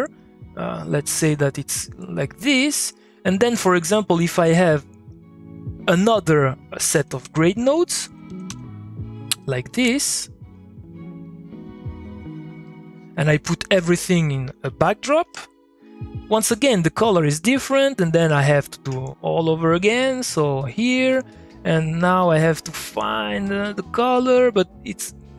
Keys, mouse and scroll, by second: 6.9-8.5 typing, 7.7 click, 9.1 click, 13.7 Tab, 15.2 Return, 16.4 click, 19.4-24.4 drag.